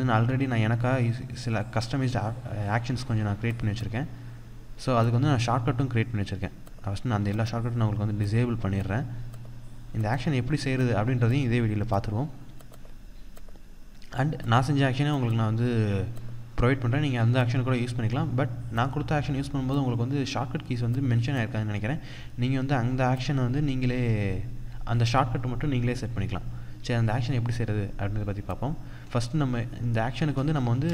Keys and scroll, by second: 30.0 ctrl+z.